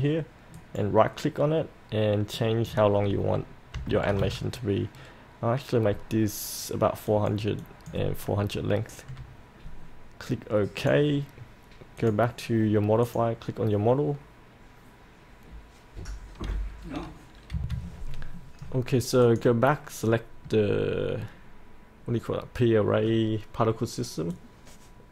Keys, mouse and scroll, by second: 0.6 right click, 2.3-3.5 drag, 3.7 KP_4, 4.0 KP_0, 7.1 click, 17.5 F8, 19.2-25.1 drag.